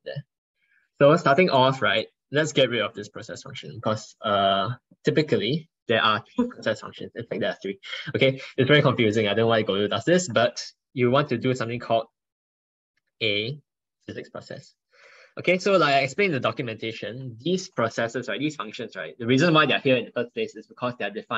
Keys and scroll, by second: 11.8 ctrl+Right, 12.1 ctrl+Right, 12.5 ctrl+Right, 13.0 ctrl+Right.